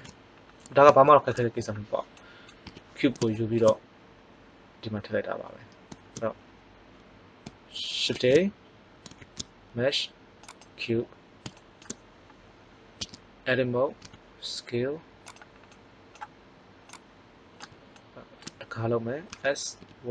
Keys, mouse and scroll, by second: 2.6 KP_1, 8.0 shift+a, 9.1 shift+a, 11.5 middle click, 12.9 Tab, 14.0 s, 15.4 click, 19.2 s.